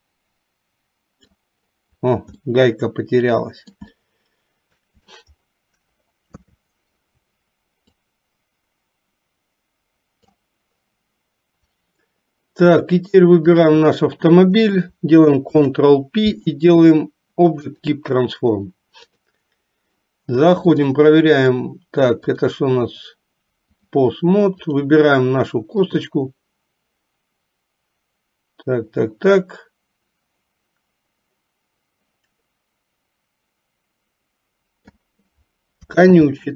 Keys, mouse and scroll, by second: 2.6-4.0 middle drag, 4.1-5.4 shift+middle drag, 6.5 KP_3, 8.0 click, 8.7-10.5 drag, 13.7 shift+click, 15.6 ctrl+p, 19.1 click, 20.9 click, 22.4-24.1 drag, 26.2-35.3 drag, 36.3 ctrl+z.